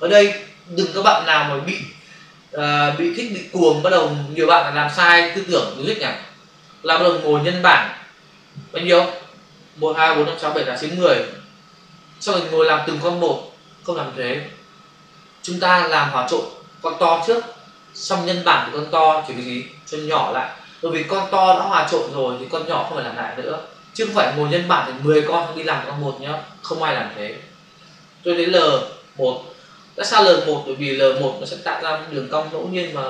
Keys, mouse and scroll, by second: 29.7 click.